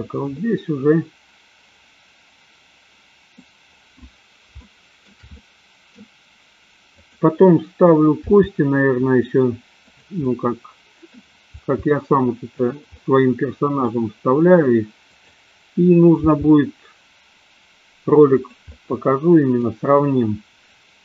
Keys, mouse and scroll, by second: 0.4-3.4 middle drag, 3.4 scroll down 1, 4.6 shift+middle click, 5.0 scroll down 1, 5.4 scroll up 1, 5.5 middle click, 7.0 click, 8.1 r, 10.3-11.1 middle drag, 11.6 r, 13.0 middle click, 15.0 click, 16.1 g, 18.6-19.6 middle drag.